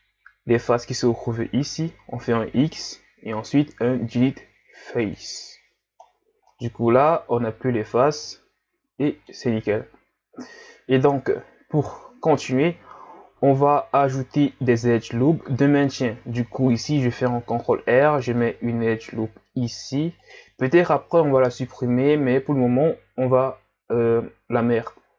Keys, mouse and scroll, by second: 0.0-0.7 scroll up 2, 2.7 x, 6.0-6.5 scroll down 4, 6.5-9.5 middle drag, 11.1 KP_1, 13.5-14.0 scroll up 2, 14.4-15.0 scroll down 3, 15.0 scroll up 1, 16.2 ctrl+r.